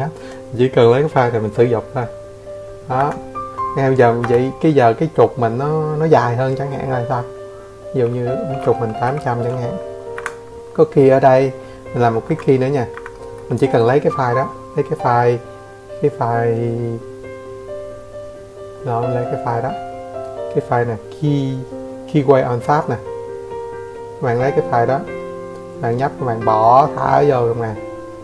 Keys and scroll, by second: 1.1 8, 2.2 Escape, 2.2 8, 4.3 Escape, 5.0 Escape.